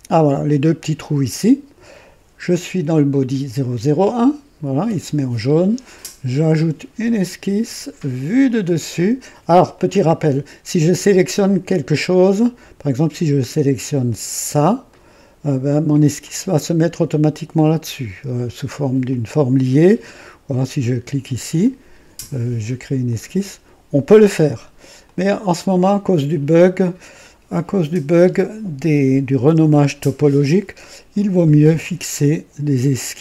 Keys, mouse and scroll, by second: 6.9 click, 8.4 click, 9.7 click, 14.8 click, 16.1 click, 19.0 click, 19.8-20.6 drag, 21.5 click, 23.0 click, 25.0 click, 28.1 Delete, 29.3 KP_2, 30.5 scroll up 1, 31.3-31.9 right drag.